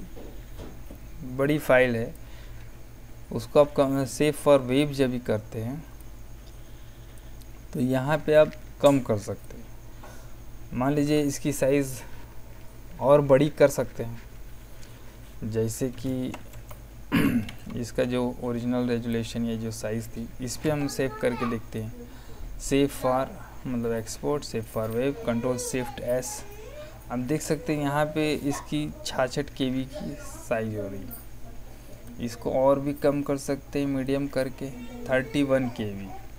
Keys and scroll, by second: 16.0 Escape, 17.4 ctrl+z, 20.6 Escape.